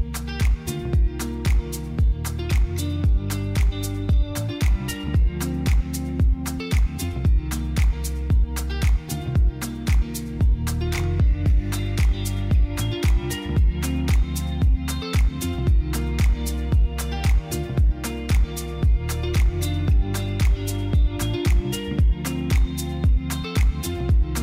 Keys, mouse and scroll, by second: 3.8 shift+click, 4.5 shift+middle click, 9.7-11.5 middle drag.